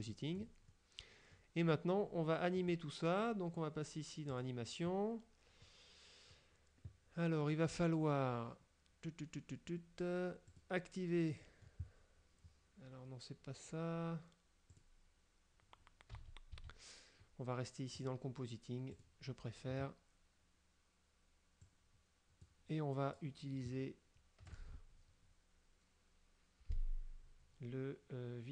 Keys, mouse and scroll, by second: 0.2 click, 0.8 middle click, 2.7 click, 4.4 click, 5.7 click, 10.6 click, 11.5 middle click, 14.8 click, 16.2 a, 18.1 click, 19.0 click, 21.7 click, 24.6 click.